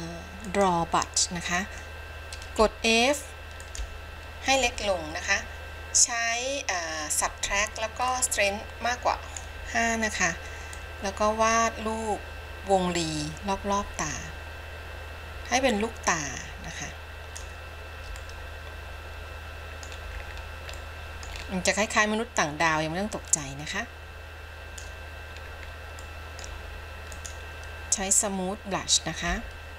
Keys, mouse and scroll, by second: 0.5 click, 2.7 f, 8.2-9.5 drag, 10.9-17.6 drag, 18.3-20.1 middle drag, 20.3-21.0 scroll down 4, 21.0 middle click, 21.6-22.2 scroll up 2, 22.3 scroll up 2, 23.5-25.0 drag, 25.6-26.2 scroll down 2, 26.2 middle click, 27.3 click, 29.4 f.